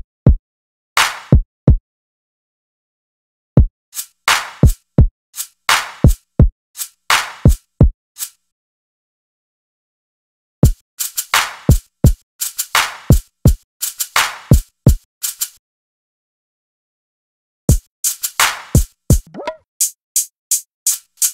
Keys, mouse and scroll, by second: 0.6-3.4 drag, 5.0 click, 15.5 click, 18.5 click.